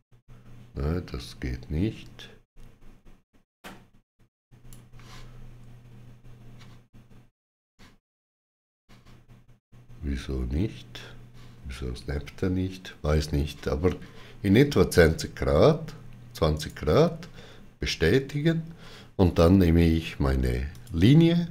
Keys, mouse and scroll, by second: 16.4 right click, 20.6 click.